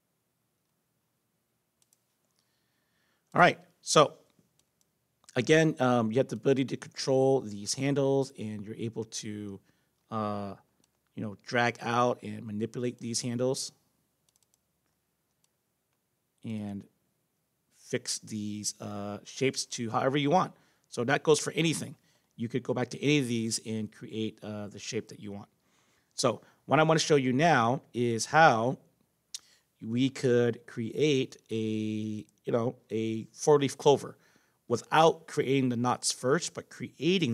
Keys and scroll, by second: 18.9 ctrl+z.